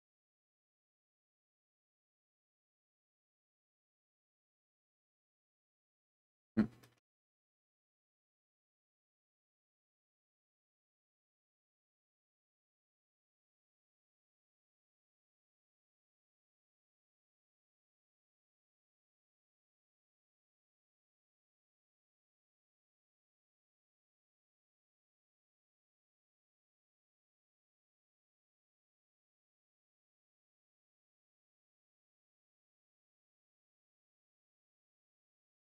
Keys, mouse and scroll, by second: 0.2 click, 0.9-1.7 right drag, 1.7 middle drag, 2.1-2.9 middle drag, 4.8-6.1 middle drag, 6.5 middle drag, 7.1 shift+middle drag, 8.1-8.5 middle drag, 9.8-11.3 drag, 12.5 click, 12.9-13.3 middle drag, 13.9 1, 16.4 shift+2, 16.5 shift+3, 17.6-17.9 middle drag, 18.1 Tab, 19.1 click, 19.7 middle click, 21.1 shift+right click, 22.0 middle click, 23.5 KP_Decimal, 25.2-27.3 middle drag, 27.7 Delete, 29.2 middle click, 30.3 click, 32.4 ctrl+Delete, 34.4-35.6 middle drag.